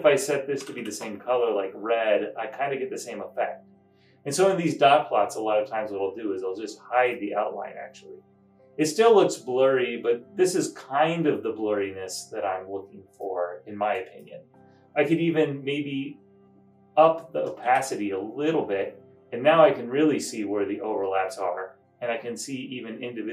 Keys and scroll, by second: 0.5-1.3 typing, 17.3-18.2 typing.